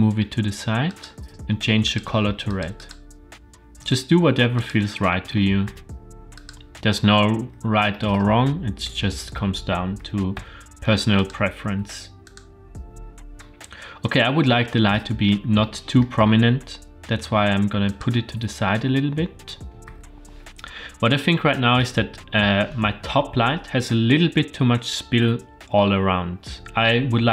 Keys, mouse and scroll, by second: 1.9 click, 2.8 click, 3.9 g, 5.4 r, 7.4-7.9 scroll down 2, 7.9 middle click, 8.5 scroll up 2, 8.9-9.4 middle drag, 9.9 g, 11.6 r, 13.3 middle click, 13.6-14.0 middle drag, 14.3-14.7 scroll up 2, 14.9-15.4 shift+middle drag, 15.6-16.1 middle drag, 16.4 g, 18.8 r.